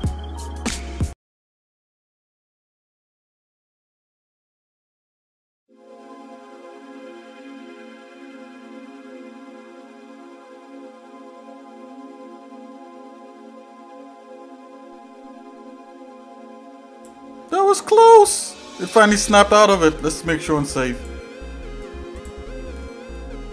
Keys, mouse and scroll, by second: 12.2 click, 12.5 ctrl+s, 12.5 middle click, 18.3-19.4 middle drag, 20.9-22.3 drag.